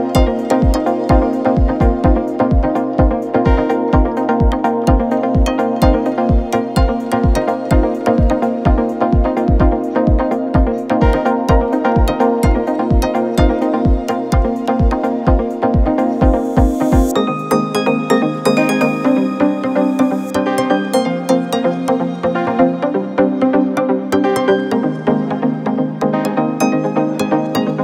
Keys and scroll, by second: 1.9 ], 3.1 4, 5.8 3, 6.5 ], 7.2 ], 8.2-9.4 typing, 12.5 3, 13.2 4, 13.9 F3, 14.2 shift+i, 14.6 3, 26.0 Delete, 26.8 4.